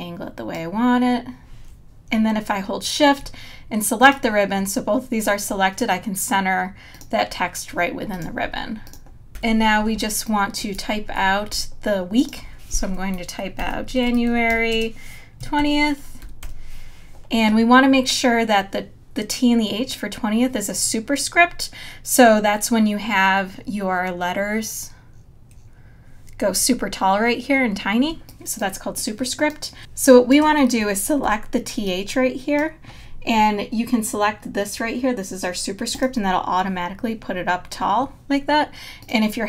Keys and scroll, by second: 9.3 super+-, 9.8 space, 11.5 t, 13.4-16.9 typing, 28.1 space, 31.2 t.